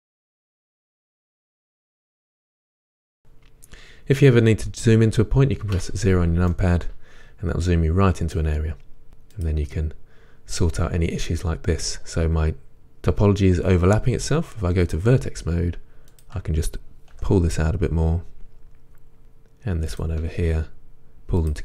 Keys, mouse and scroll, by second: 0.0 KP_1, 0.4 e, 0.5 click, 0.5 g, 1.0 click, 1.8 s, 2.0 shift+middle click, 2.2 scroll up 1, 2.5 click, 2.7 g, 2.9 click, 3.0 scroll up 1, 3.1 scroll down 1, 5.8 KP_Decimal, 6.5-9.1 middle drag, 9.1 click, 14.9-17.1 drag, 17.1 g, 19.2 click, 20.3 g.